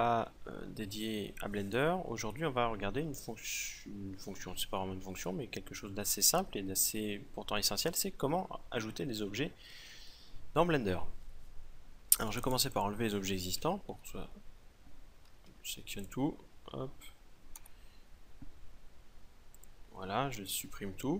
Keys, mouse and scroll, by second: 13.8 x, 16.0 a, 16.5 a, 17.1 a, 17.5 x, 19.0 x.